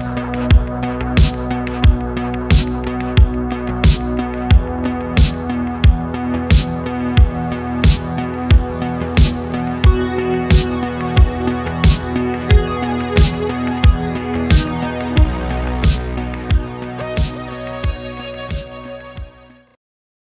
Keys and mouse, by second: 2.9 Escape, 3.3 middle click, 3.8 middle click, 4.4 ctrl+z, 5.2-5.8 drag, 6.0 a, 6.4 click, 7.4 alt+r, 8.6 alt+g, 9.7 alt+a, 10.2 middle click, 12.4 click, 13.3 middle click, 14.2 middle drag, 14.9-15.4 middle drag, 15.6-17.2 middle drag, 17.6 middle click, 18.2 ctrl+s.